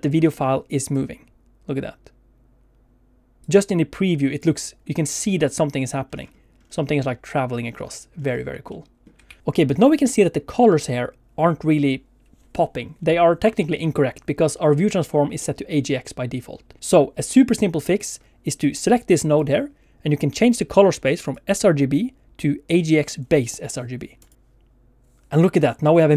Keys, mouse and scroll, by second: 0.2 shift+middle click, 0.9 click, 3.4 click, 5.4-6.9 alt+scroll down 10, 7.6-8.5 alt+scroll down 7, 8.8 middle click, 9.3 ctrl+s, 9.4-10.0 scroll up 2, 10.0 middle click, 15.4 middle click, 18.6 click, 21.2 click, 25.8 middle click.